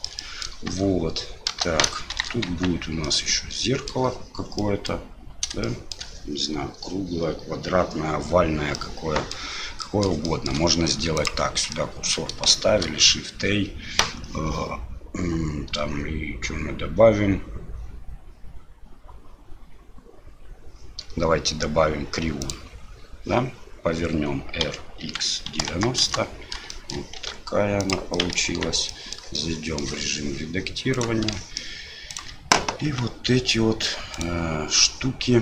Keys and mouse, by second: 0.3 middle click, 0.7 space, 2.1 shift+Left, 2.5 Tab, 3.0 middle click, 4.6 middle click, 5.7 shift+drag, 5.7 shift+middle click, 8.8-9.3 middle drag, 9.8 middle click, 10.3 shift+middle click, 11.2 middle click, 11.7 middle click, 12.6 shift+a, 26.7 shift+middle click, 27.2 s, 28.3 middle click, 28.5 Tab, 28.9 middle click, 29.4 shift+middle click, 30.9 click, 31.3 shift+middle click, 32.1 shift+right click, 32.9 s.